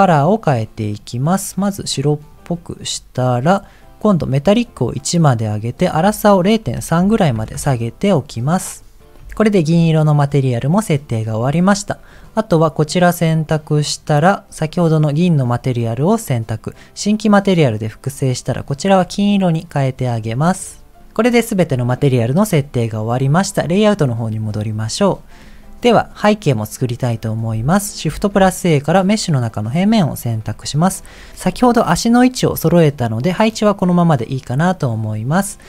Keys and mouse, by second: 0.1 click, 4.6 click, 5.8-7.5 drag, 9.5 shift+middle click, 12.1 click, 13.7-15.5 drag, 17.2 click, 18.2 click, 24.5 click, 28.0 shift+a, 30.4 KP_1, 32.0-33.6 middle drag, 34.2 middle click.